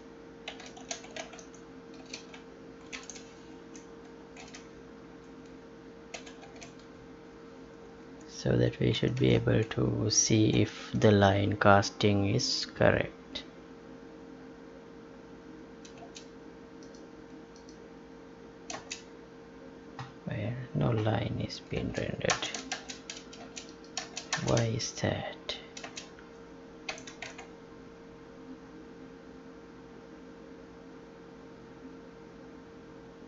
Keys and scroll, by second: 3.6 Left, 4.4 ctrl+v, 5.0 Right, 6.4 ctrl+s, 8.2 alt+Tab, 10.5 ctrl+p, 16.0 space, 18.7 space, 21.7 space, 26.9 ctrl+p, 27.4 Tab.